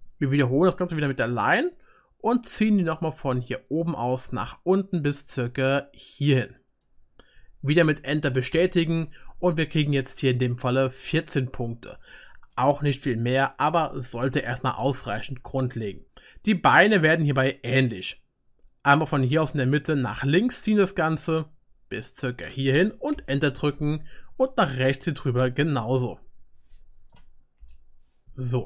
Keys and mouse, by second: 1.5-10.0 drag, 1.5-10.0 middle drag, 1.5-10.0 right drag, 14.6-18.6 drag, 14.6-18.6 middle drag, 14.6-18.6 right drag, 24.0-28.6 drag, 24.0-28.6 middle drag, 24.0-28.6 right drag.